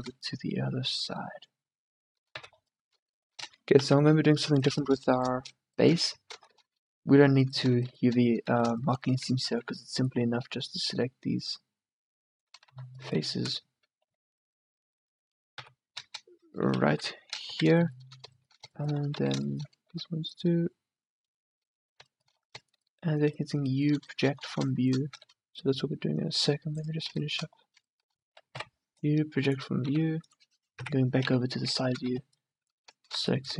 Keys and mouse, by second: 2.6 a, 3.9 KP_1, 6.2 Tab, 8.6 z, 9.7 c, 12.8 z, 13.2 z, 14.1 c, 15.2-17.0 drag, 15.7 KP_3, 17.0 KP_1, 17.5 z, 19.3 z, 20.0 c, 25.3 c, 26.7-28.5 middle drag, 28.7 u, 29.6 click, 30.1 s, 30.8 KP_3, 31.6 middle click, 32.1 a, 32.2 c, 33.0 click, 33.3 c.